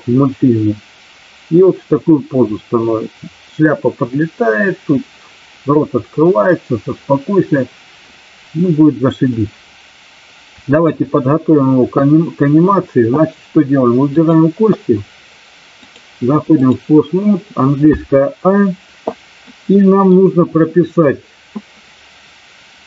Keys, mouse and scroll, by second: 9.3-10.9 drag, 14.0 click, 15.9 click, 19.5 middle click.